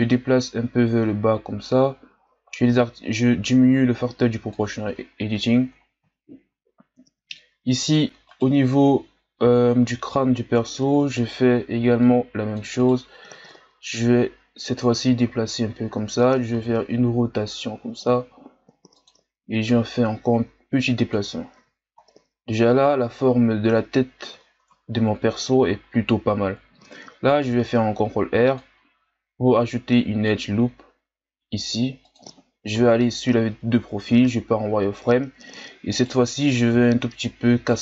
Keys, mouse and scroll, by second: 5.2-6.2 shift+scroll up 5, 8.3 right click, 11.0 c, 13.4-16.5 drag, 16.5 r, 19.7-21.6 drag, 21.6 z, 22.0-22.9 scroll down 1, 22.9-24.4 scroll up 1, 24.4-25.4 shift+scroll up 2, 25.4-26.8 scroll up 1, 27.3 ctrl+r, 32.7 KP_3, 34.0 z, 35.9 right click, 36.7 b.